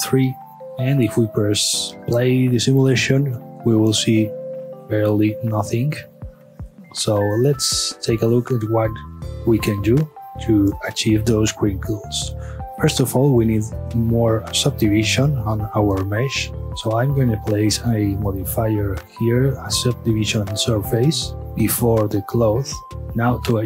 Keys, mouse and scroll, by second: 0.4-0.9 middle drag, 0.9 space, 1.1 space, 4.5-6.0 right drag, 6.0 middle click, 12.3 space, 13.6 click, 15.0-15.6 middle drag, 15.6 space, 16.0 middle click, 16.5 space, 18.0 click, 19.8-21.1 drag, 21.7-23.0 drag.